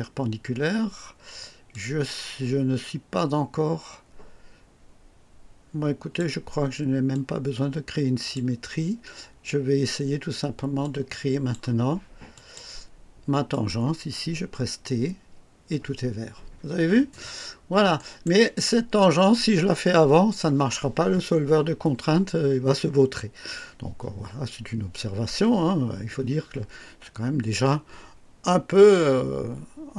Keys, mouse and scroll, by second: 1.6-6.3 drag, 7.0-8.5 drag, 10.7-11.6 drag, 12.3 click, 13.4 click, 14.4 typing, 16.9 scroll up 1, 17.3 scroll down 1, 17.9-18.4 right drag.